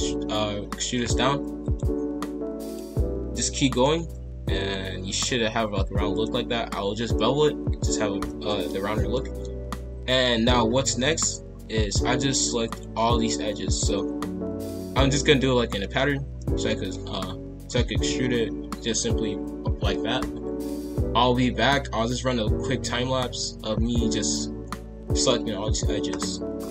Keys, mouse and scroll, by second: 3.3 e, 3.9 s, 5.0 ctrl+b, 7.1-8.7 middle drag, 8.7-9.1 scroll down 1, 9.1-10.6 middle drag, 10.6-12.6 scroll up 2, 12.6 alt+click, 14.9-19.5 middle drag, 26.6 middle click.